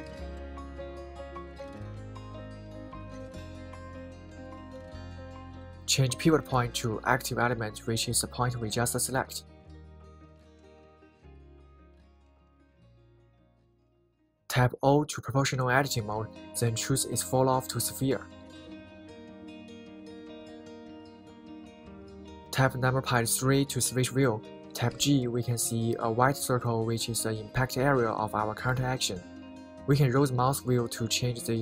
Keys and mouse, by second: 3.8-5.1 middle drag, 5.8-8.0 right drag, 9.6-10.7 right drag, 13.3 o, 16.6-19.9 right drag, 21.5 KP_3, 25.8 g.